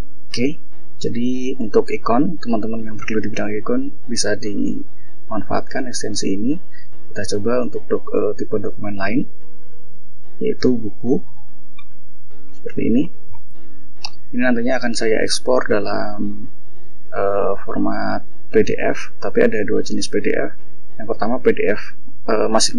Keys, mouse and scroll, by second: 0.0 click, 2.9 click, 5.6 click, 8.6 click, 9.7 click, 10.4-11.9 ctrl+scroll down 5, 12.5-13.4 shift+scroll up 2, 13.5-14.3 shift+scroll up 3, 15.4 click, 16.1 click, 17.3 shift+scroll down 1, 18.1 shift+click, 18.7 shift+scroll down 1, 19.3 shift+scroll down 1, 19.9 shift+scroll down 2, 20.0-20.7 shift+scroll up 4, 22.2-22.7 drag.